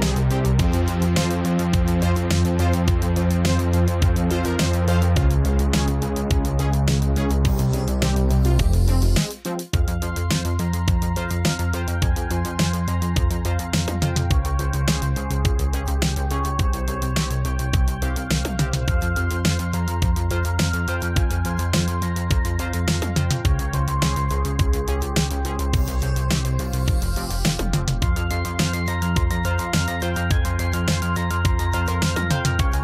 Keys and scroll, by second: 1.0 space.